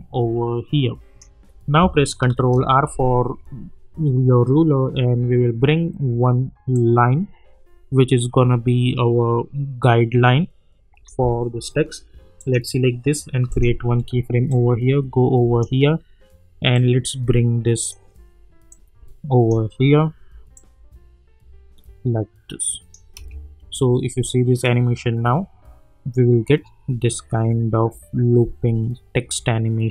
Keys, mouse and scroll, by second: 2.5 ctrl+r, 6.7-23.1 drag, 23.1 space.